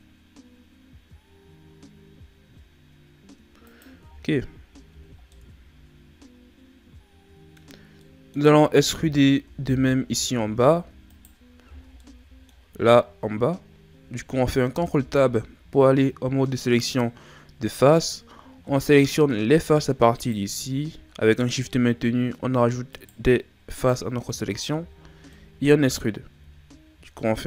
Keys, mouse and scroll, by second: 4.0 Tab, 4.7 scroll down 1, 4.9 a, 5.2 scroll down 1, 5.3-8.9 middle drag, 8.9 KP_1, 9.9 shift+scroll down 3, 10.2-10.8 scroll up 6, 11.1 right click, 11.6 Tab, 12.0-14.7 middle drag, 14.7 ctrl+Tab, 18.1-18.7 scroll up 2, 18.7-20.2 middle drag, 20.2 right click, 22.9 shift+right click, 23.7 shift+right click, 24.3 middle click, 25.0 shift+scroll down 4, 25.3-26.3 middle drag, 26.3 e.